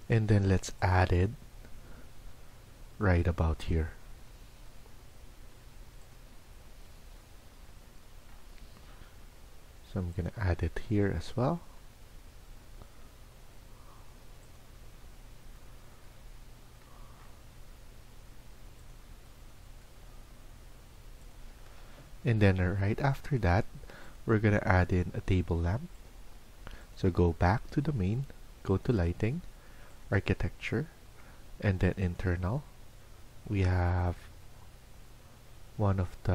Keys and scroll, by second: 24.6 Escape.